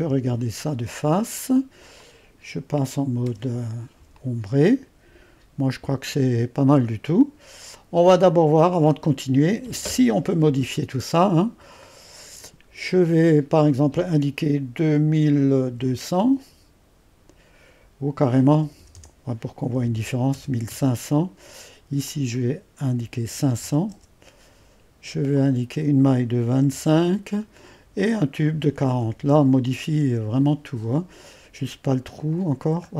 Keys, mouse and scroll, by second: 0.6-1.9 scroll down 1, 2.0-3.3 drag, 3.3 &, 4.1-11.7 drag, 11.8-12.9 drag, 13.5-15.4 drag, 15.1-16.6 typing, 18.6-21.2 typing, 22.0-23.2 drag, 23.0-24.4 typing, 25.3-26.4 drag, 26.2-27.1 typing, 27.9-29.0 drag, 29.0 typing, 30.0 Return, 32.0 click, 32.8-32.9 scroll up 1.